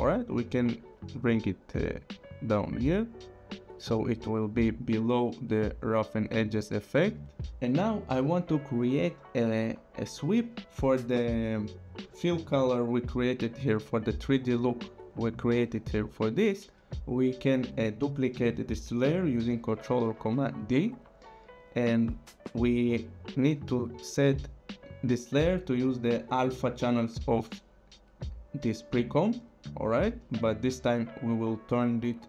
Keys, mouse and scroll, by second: 0.7 click, 4.9 click, 9.5-10.7 scroll, 17.8 click, 19.8 ctrl+d, 24.1 click, 30.0 click.